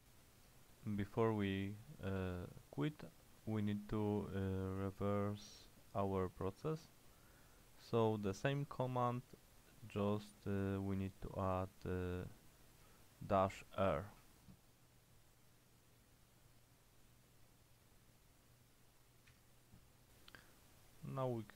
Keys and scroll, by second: 4.9 shift+;, 6.5 shift+5, 7.9-8.9 typing, 10.2-11.6 typing, 12.9-14.2 typing, 19.4 Return.